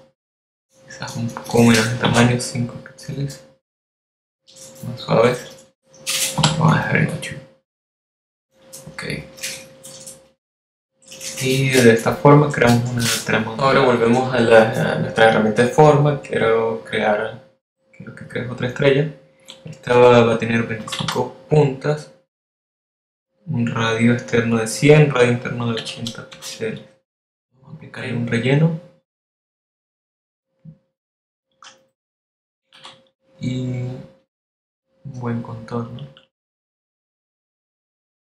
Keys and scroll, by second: 3.0 5, 7.3 8, 22.5-23.4 typing, 27.7 8, 28.5 space, 34.7 shift+x, 35.9 x.